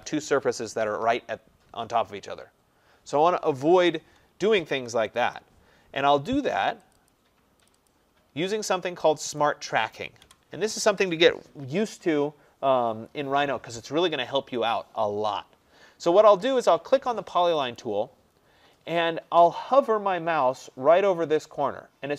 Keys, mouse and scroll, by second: 4.8 Delete, 5.2 click, 5.3 Delete, 7.0 click, 7.1 click, 7.7 click, 7.9 click, 8.5 middle click, 8.6 middle click, 8.6 middle click, 9.4 click, 10.3 Delete, 11.4-12.1 scroll down 3, 12.1 middle click, 12.1 middle click, 12.3 middle click, 16.7-17.4 scroll, 17.8 click.